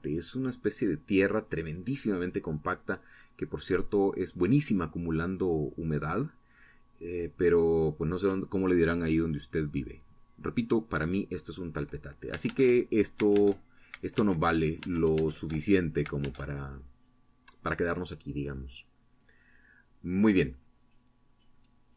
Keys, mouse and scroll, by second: 1.3-2.8 shift+middle drag, 3.5 middle click, 20.9 t, 21.8 t.